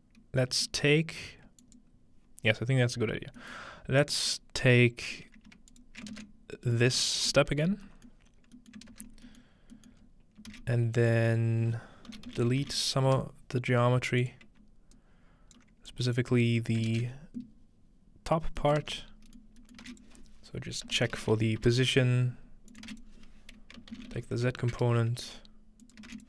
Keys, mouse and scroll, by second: 1.6 click, 3.4 click, 3.6-5.5 middle drag, 4.0-6.9 drag, 6.1 ctrl+space, 6.8 middle click, 7.1-7.9 alt+middle drag, 7.6-8.4 scroll up 1, 8.1-10.2 middle drag, 8.4-8.7 scroll down 1, 8.9 ctrl+space, 9.7 scroll down 1, 10.0 scroll up 1, 10.2-11.0 typing, 11.0-12.3 drag, 12.1-13.6 typing, 12.5 click, 14.2 click, 15.9 click, 16.3-17.6 scroll down 1, 18.8 ctrl+middle click, 19.0-26.2 typing, 19.1-20.0 scroll up 1, 19.9 shift+click, 22.7 shift+click, 25.8-26.2 shift+drag.